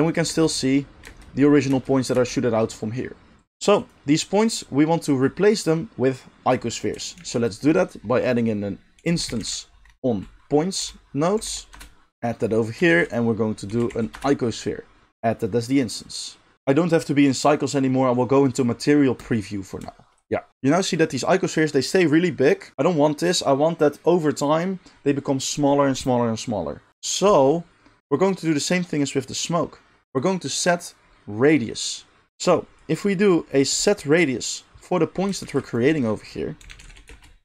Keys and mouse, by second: 0.2 space, 1.0 space, 1.7 space, 2.1 space, 3.3-7.3 middle drag, 7.1 shift+a, 12.8 shift+a, 15.9 middle drag, 16.3-19.3 middle drag, 19.5 shift+click, 20.5 right click, 35.4 shift+a.